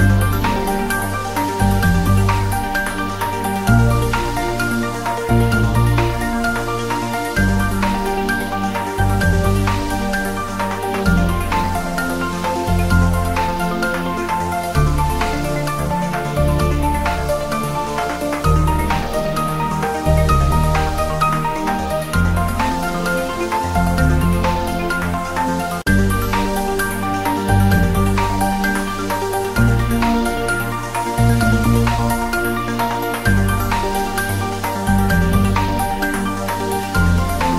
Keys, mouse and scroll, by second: 0.2-1.9 drag, 1.9-2.7 scroll down 1, 2.8 scroll up 1, 4.3 scroll up 1, 6.0 scroll down 1, 9.4-10.0 scroll down 1, 10.4-10.7 scroll up 1, 11.0 click, 11.7 scroll down 1, 12.5 ctrl+3, 13.1-13.4 scroll down 1, 18.2 scroll down 1, 18.8 Tab, 19.0 scroll down 1, 19.8 ctrl+r, 20.0 click, 21.4-22.8 drag, 22.8 ctrl+r, 23.0 click, 25.3 click, 25.4 Tab, 26.6-27.0 scroll up 1, 27.4 Tab, 27.9 scroll down 1, 28.3 ctrl+r, 28.5 click, 31.2 click, 31.9-32.2 scroll down 1, 32.3 ctrl+z, 32.9 scroll down 1, 33.3 ctrl+r, 33.6 click, 35.4 click, 35.6 Tab, 36.2 scroll up 1, 37.3 Tab.